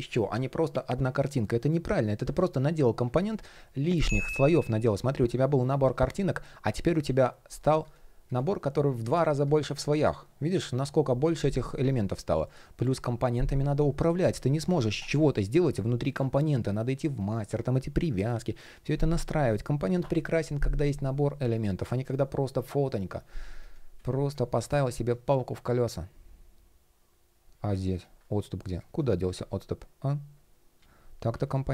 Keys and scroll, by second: 27.9 shift+p.